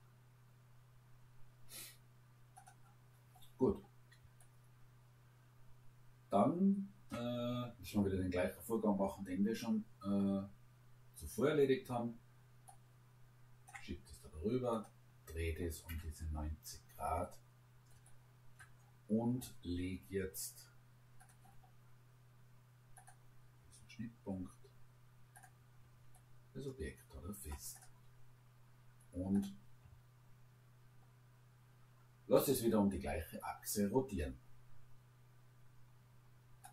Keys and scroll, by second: 15.9 Return.